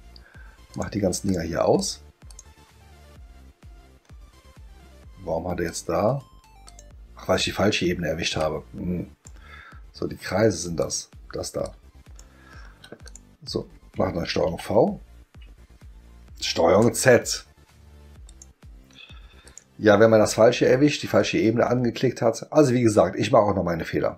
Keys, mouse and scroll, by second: 0.7 click, 1.3 click, 1.8 click, 2.3 click, 5.6 click, 6.6 click, 8.4-9.2 drag, 10.8 click, 11.6 click, 13.0 click, 16.3 ctrl+z, 18.3 click, 19.5 click.